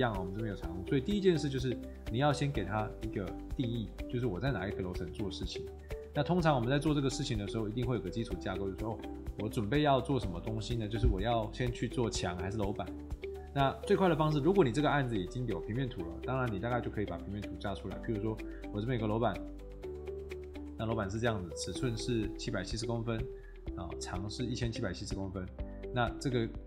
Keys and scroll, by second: 3.7 Escape, 5.9 Escape, 20.9 Escape, 22.5 Escape.